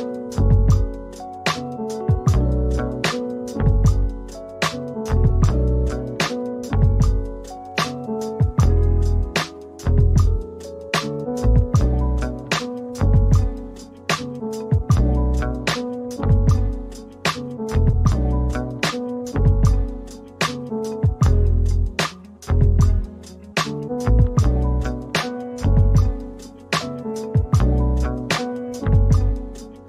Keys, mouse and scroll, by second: 1.3 double click, 4.3 middle click, 5.7 alt+click, 9.8 scroll up 1, 10.2 alt+click, 14.0 1, 18.4 middle click, 19.5 scroll up 1, 23.6-24.5 scroll up 1, 27.4 scroll down 1, 28.0 alt+middle click.